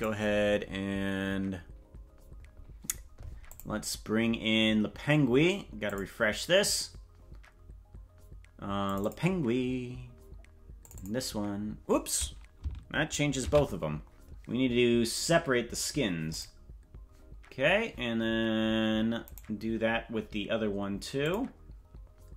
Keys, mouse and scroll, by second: 13.5 ctrl+z, 16.3 click, 19.3 right click, 21.2 click.